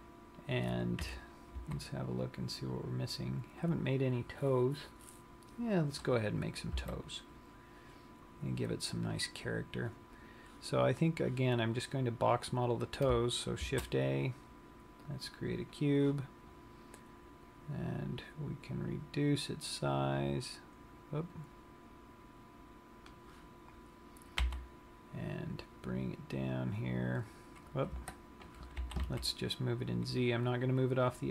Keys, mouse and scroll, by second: 1.1 KP_3, 1.8 z, 4.6-5.3 scroll up 3, 7.0 KP_1, 14.1 shift+a, 17.7 click, 24.9 g, 29.3 g.